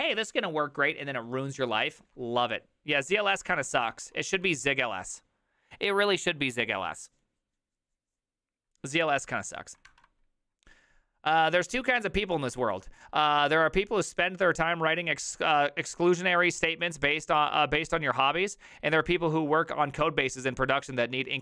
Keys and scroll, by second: 3.4-3.8 typing, 9.9 alt++.